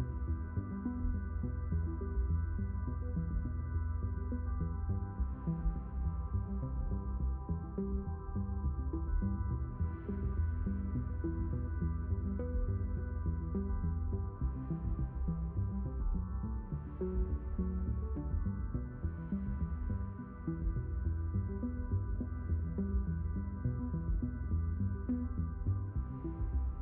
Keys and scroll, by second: 2.2 q, 3.2 q, 5.6 d, 6.6 s, 8.1 q, 10.7 q, 11.8 shift+n, 13.6 s, 16.6 shift+n, 22.4 q.